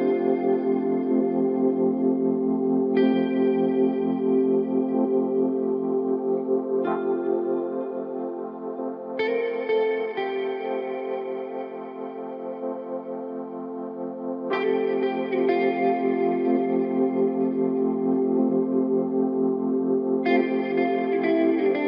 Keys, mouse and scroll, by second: 0.2 Tab, 1.2 click, 1.6-2.1 scroll up 2, 2.1-5.2 middle drag, 5.2 scroll down 2, 5.4-6.9 middle drag, 6.9 click, 7.8-10.1 drag, 11.6 click, 12.3-12.7 scroll down 6, 14.5-15.0 drag, 15.0-15.7 scroll down 1, 15.8 click, 16.9-17.9 scroll up 2, 17.9 drag, 18.5 click, 19.9 click, 20.7-21.8 drag.